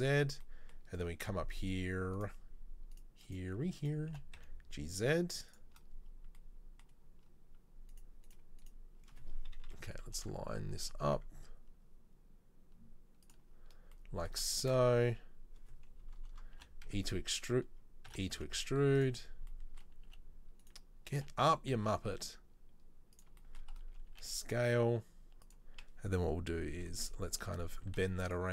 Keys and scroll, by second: 4.2 g, 9.9 KP_3, 10.3 KP_1, 10.9 g, 16.1 KP_3, 16.7 r, 18.2 e, 20.3 s, 21.3 g, 24.2 s, 26.6 KP_3, 27.0 KP_1, 28.0 z.